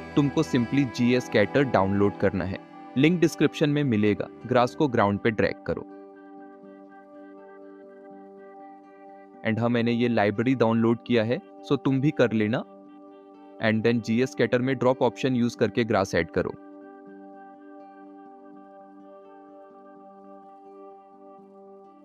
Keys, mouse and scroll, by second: 9.3 shift+middle drag, 12.2 click, 13.4 Delete, 13.9 n, 13.9-15.3 drag, 15.6 click, 17.1-18.7 drag, 19.4 ctrl+s.